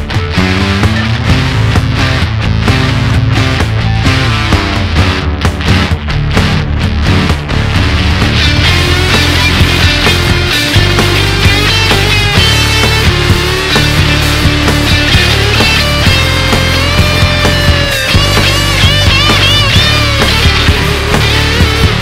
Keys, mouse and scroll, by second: 0.6 shift+middle click, 1.3 scroll up 1, 1.4 middle click, 2.0-2.8 scroll up 2, 2.8-3.3 scroll up 1, 3.3 click, 4.9 ctrl+shift+click, 5.7-8.3 middle drag, 8.3 click, 9.3 click, 10.1 KP_1, 10.8-11.6 shift+middle drag, 11.6 alt+z, 12.0-13.9 middle drag, 13.9-14.4 scroll up 2, 14.4 alt+z, 14.9-15.9 middle drag, 15.9 shift+click, 16.9 alt+click, 18.2 shift+click, 19.3 ctrl+shift+click.